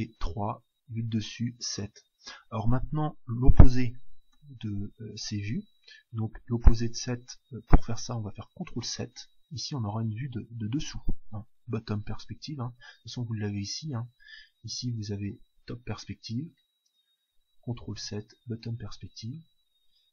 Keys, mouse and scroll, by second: 0.8 KP_7, 8.9 ctrl+KP_7, 14.5 KP_7, 17.9 ctrl+KP_7.